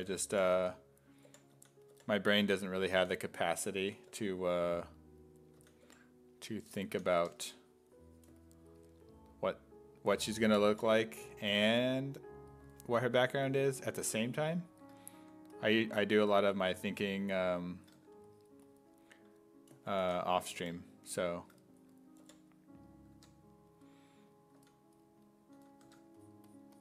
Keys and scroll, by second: 0.0-4.1 typing, 5.6 s, 5.9 5, 6.9 s, 7.2 1, 10.2 s, 10.7 5, 12.6 s, 13.4 s, 13.9 1, 15.2 1, 20.0 s, 20.6 5, 22.2 5, 23.2 1, 24.6 s, 25.6 s, 25.9 1.